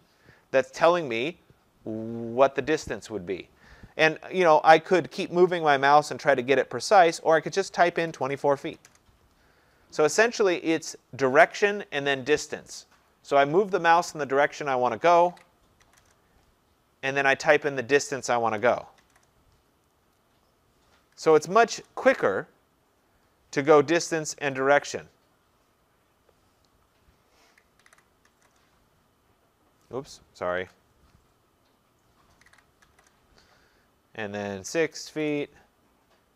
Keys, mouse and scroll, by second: 7.8-9.2 typing, 15.3-16.3 typing, 18.4-19.1 typing, 21.0-22.1 typing, 23.7-24.5 typing, 27.3-28.8 typing, 30.7 ctrl+z, 32.2-33.4 typing, 34.5-35.2 typing.